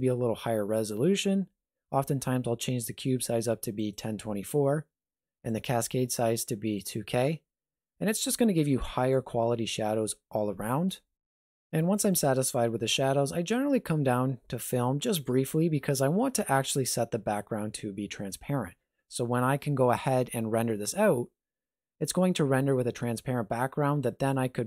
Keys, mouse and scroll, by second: 0.7 click, 5.5 click, 11.9 click, 15.1 click.